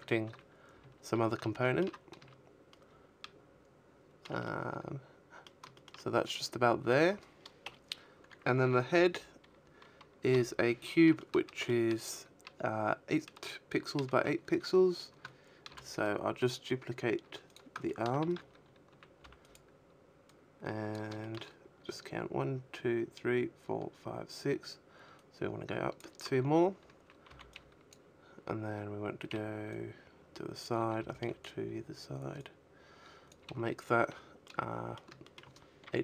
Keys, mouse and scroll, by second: 0.0 shift+middle click, 1.7 middle click, 3.0 shift+middle click, 3.4 shift+middle click, 4.9 KP_1, 6.2 l, 7.6 l, 8.5 shift+middle click, 13.0 shift+d, 14.8 click, 15.2 shift+middle click, 15.6 z, 16.1 a, 16.5 b, 17.6 click, 18.4 shift+middle click, 22.5 click, 24.2 a, 25.8 b, 27.0 click, 28.1 a, 28.3 b, 29.7 click, 30.8 a, 31.9 middle click, 32.6 shift+middle click, 33.1 KP_3, 34.1-34.4 scroll up 3, 34.4 shift+middle click, 34.7 middle click.